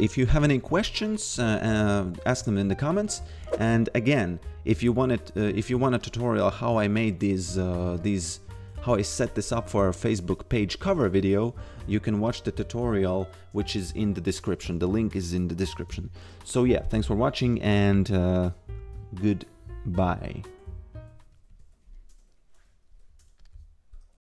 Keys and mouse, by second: 0.0 click.